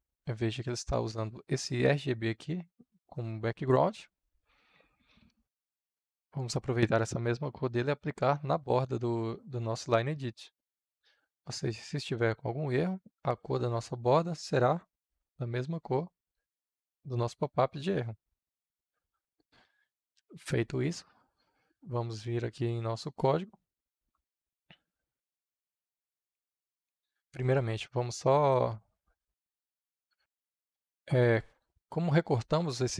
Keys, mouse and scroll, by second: 5.2 ctrl+c, 11.5-14.6 drag, 15.2 ctrl+v, 16.0-17.4 drag, 19.0 ctrl+s, 25.1-27.3 drag, 28.7 click, 29.7 ctrl+c, 29.9 ctrl+c, 30.1 ctrl+c, 31.4-32.9 drag.